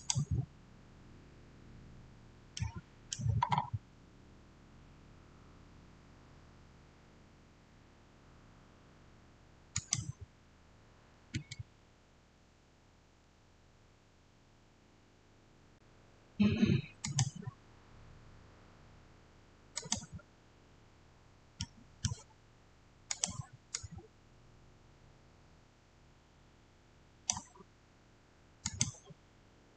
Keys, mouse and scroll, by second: 2.4 middle click, 3.4-5.1 scroll up 1, 9.6 click, 13.5 click, 13.5-13.9 scroll down 1, 16.9 click, 19.6 click, 21.5-23.0 middle drag, 23.0-29.7 drag.